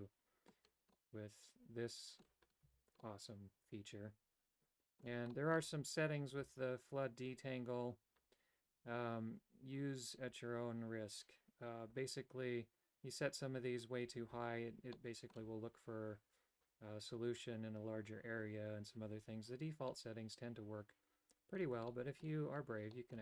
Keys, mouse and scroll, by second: 0.9-2.2 middle drag, 2.7 Tab, 3.0-5.0 middle drag, 5.3 middle click, 14.9 middle click, 19.9-21.6 middle drag, 21.9 shift+middle click, 22.9 middle click.